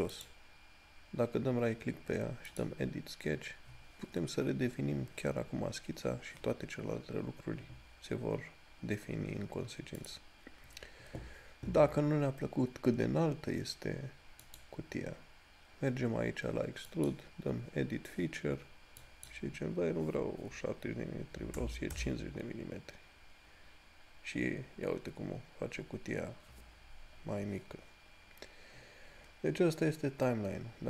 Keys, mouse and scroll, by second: 0.8 right click, 2.7 click, 14.8 right click, 17.1 click.